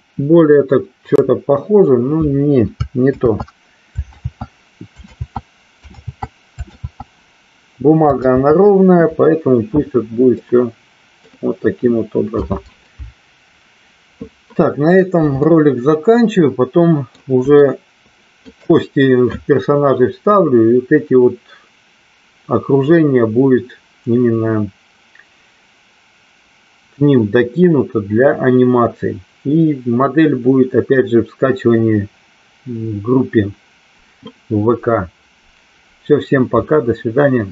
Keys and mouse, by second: 7.0 ctrl+z, 10.5 middle click, 15.9-17.4 middle drag, 17.8 shift+middle click.